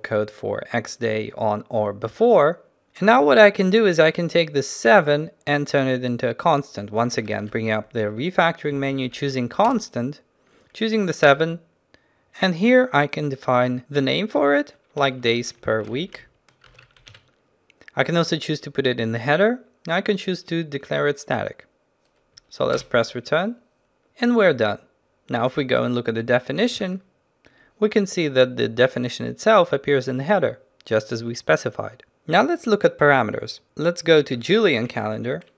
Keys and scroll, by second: 7.3 ctrl+alt+shift+t, 8.4 ctrl+alt+shift+t, 26.8 ctrl+b, 34.4 ctrl+n.